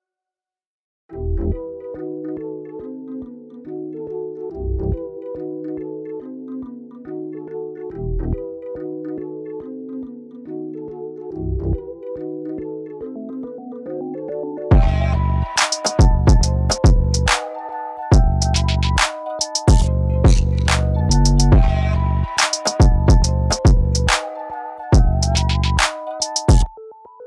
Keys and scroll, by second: 9.2 ctrl+s, 10.0 ctrl+w, 12.7 ctrl+t, 21.0 ctrl+t.